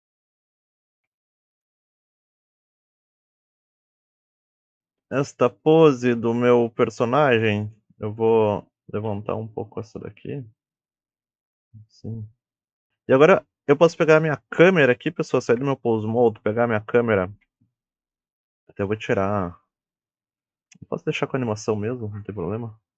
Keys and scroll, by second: 0.7 g, 1.7 KP_1, 9.3 r, 11.4 g, 12.7 g, 15.9 ctrl+Tab.